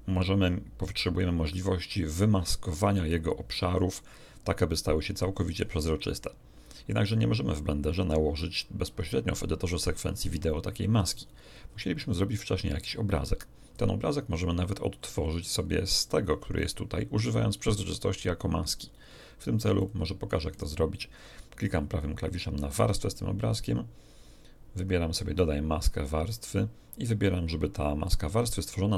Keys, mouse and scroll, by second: 19.7 click, 20.5 right click, 25.8 click.